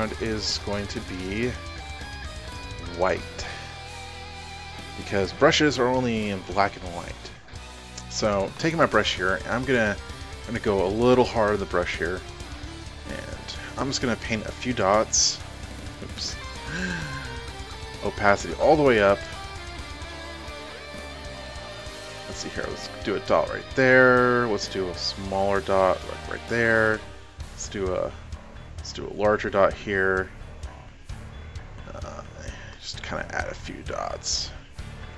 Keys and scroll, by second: 12.7-13.3 typing, 16.8 ctrl+alt+z.